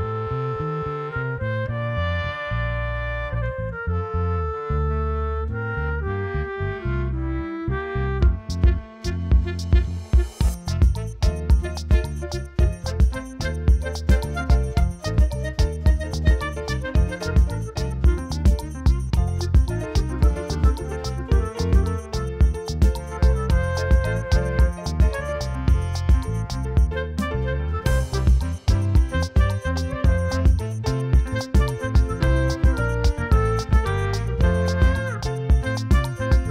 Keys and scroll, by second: 1.6 [, 2.7 o, 4.3 ctrl+alt+z, 4.5 s, 7.1 space, 8.1 [, 9.4-11.8 typing, 12.8 ctrl+alt+d, 13.2 4, 15.3 ctrl+d, 15.4 space, 16.2 ctrl+space, 16.5 l, 17.5 ctrl+alt+d, 17.9 5, 17.9 Return, 18.2 ctrl+l, 19.0 ctrl+d, 19.1 space, 19.6 space, 22.4 space, 23.2 ctrl+s.